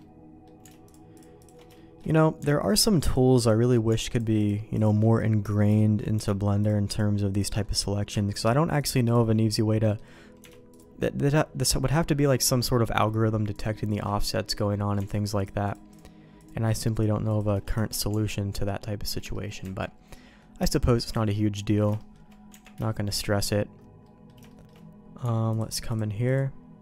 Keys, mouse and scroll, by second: 1.1 alt+shift+click, 1.7 shift+middle click, 2.6 alt+shift+click, 4.3 alt+shift+click, 4.7 alt+shift+click, 5.1 middle click, 5.7 shift+middle click, 6.6 alt+shift+click, 8.7 alt+shift+click, 9.8 middle click, 10.7-14.0 alt+shift+drag, 14.4 middle click, 15.6 alt+shift+click, 16.9 alt+shift+click, 17.7 ctrl+x, 18.1 Tab, 18.6 middle click, 19.3 shift+middle click, 19.6 Tab, 20.1 middle click, 21.1 Tab, 21.6 middle click, 21.9 shift+middle click, 22.5 Tab, 22.8 shift+middle click, 24.0 middle click, 24.4 shift+middle click, 26.2 alt+shift+click.